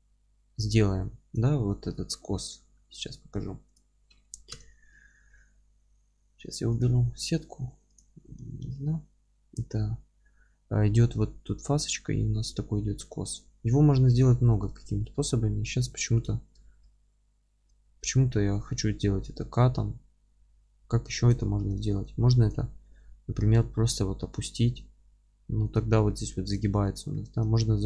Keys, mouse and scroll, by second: 0.7 alt+q, 2.7-3.2 scroll down 1, 3.2-3.7 scroll up 1, 3.7 click, 4.5 KP_7, 5.3-7.9 middle drag, 5.7-7.9 scroll up 1, 7.9-8.9 drag, 8.9-13.6 middle drag, 9.2 scroll down 1, 9.4 scroll up 1, 10.7-13.2 scroll up 1, 13.2 scroll down 1, 13.7-16.2 middle drag, 13.9-14.2 scroll down 1, 14.4 scroll up 2, 15.2 scroll up 2, 16.2 click, 16.6 alt+q, 17.0-22.4 alt+middle drag, 17.8-18.1 scroll up 2, 22.4-25.7 drag, 23.2 g, 26.0-27.8 alt+middle drag.